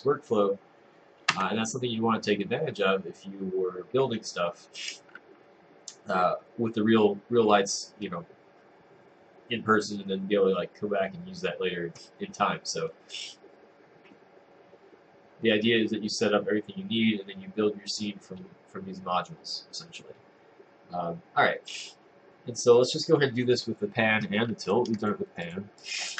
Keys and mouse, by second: 1.4 Tab.